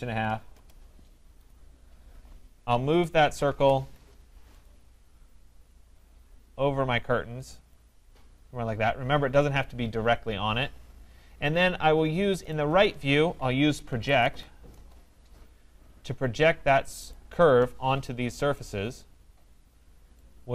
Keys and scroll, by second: 0.5 Return, 14.7 Return.